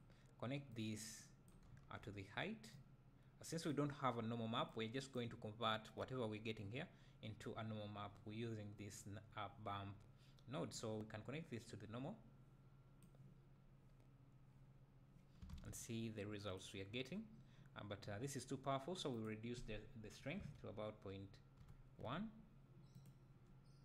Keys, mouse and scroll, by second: 2.8-4.8 drag, 10.8-14.9 drag, 13.6-14.6 scroll up 2, 14.6 scroll up 1, 14.7-16.2 scroll down 2, 16.0 click, 18.0 scroll up 2, 21.6-23.1 drag.